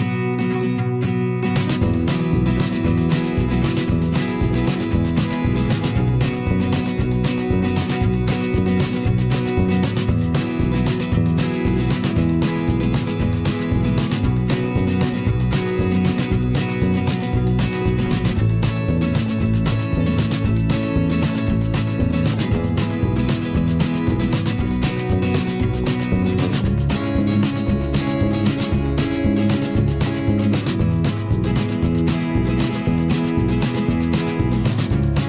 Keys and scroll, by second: 1.6 ctrl+z, 7.1 ctrl+a, 8.7 ctrl+z, 10.8 p, 13.8 ctrl+z, 18.9 ctrl+z, 21.2 v, 22.2 i, 22.8 v, 23.3 ctrl+shift+[, 23.5 ctrl+], 24.2 p, 27.8 i, 28.3 v, 29.3 /, 30.0 p, 31.7 v, 34.8 p.